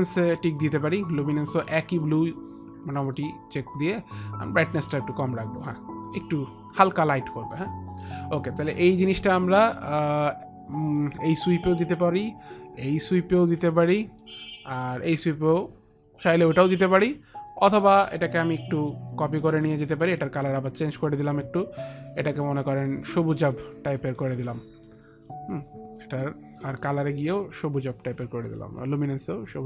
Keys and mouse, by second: 0.0 click, 1.7 click, 1.9 click, 2.3 click, 4.3 click, 4.8 click, 5.8 click, 5.9 click, 6.2 click, 7.6 click, 9.0 click, 9.2 click, 12.7 click, 15.7 click, 18.9 click, 20.1 click, 22.5 click, 23.5 click, 24.1 click, 24.7 click, 27.0 click.